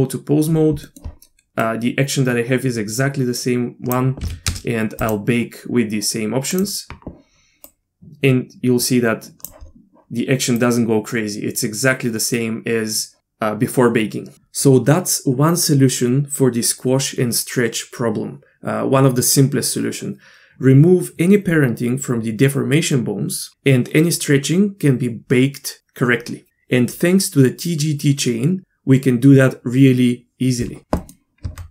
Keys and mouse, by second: 0.8 middle click, 1.6-3.9 drag, 4.2 a, 4.5 space, 7.8-9.5 drag, 10.6-13.2 drag, 31.0 middle click, 31.4 Tab.